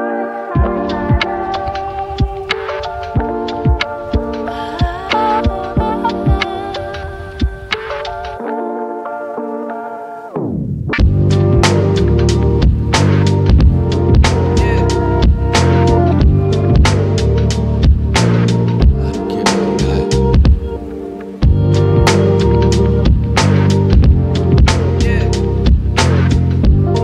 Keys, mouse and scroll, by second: 0.3 click, 0.8 right click, 1.5-1.9 scroll up 1, 1.9 click, 4.9 typing, 8.9 typing, 12.3 click, 12.6 right click, 15.3 click, 15.3-16.2 typing, 16.2 scroll up 1, 17.5 click, 18.3 scroll up 1, 20.4 click, 21.1 shift+click, 21.5 shift+right click, 22.2 shift+click, 23.5 right click, 24.1-24.4 scroll down 1, 24.4 right click, 26.7 click, 26.9 right click.